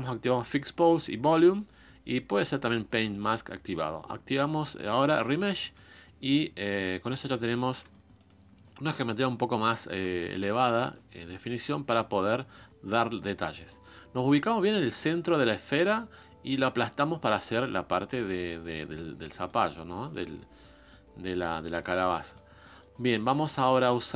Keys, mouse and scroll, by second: 6.3-7.8 middle drag, 7.8 f, 9.6 click, 10.0 f, 10.8 scroll down 1, 11.1-15.1 middle drag, 15.1-17.5 drag, 17.5-19.1 middle drag, 19.1 scroll up 1, 19.3 middle click, 20.1-21.1 drag, 21.1-21.7 scroll down 2, 21.7 click, 22.5 scroll up 2, 22.8-24.1 middle drag.